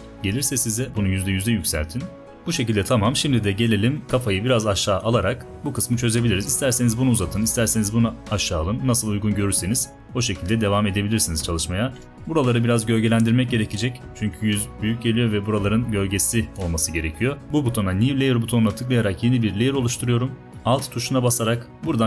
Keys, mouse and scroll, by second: 2.2 v, 4.0 shift+click, 7.7 click, 9.7 space, 10.9 click, 10.9 space, 11.4-12.5 drag, 20.5 d.